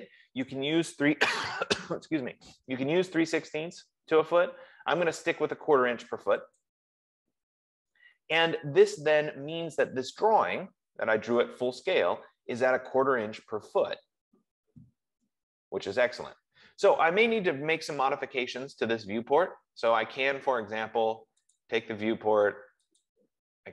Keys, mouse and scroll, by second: 7.0-11.9 drag, 18.3 F15, 20.2 Escape, 21.8 click, 23.3 click.